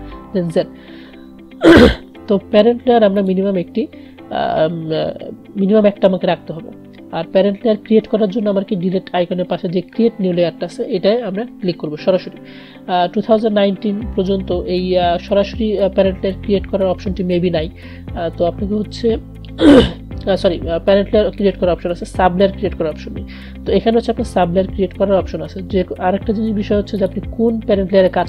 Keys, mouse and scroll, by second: 0.3 ctrl+z, 3.2 click, 27.2 click.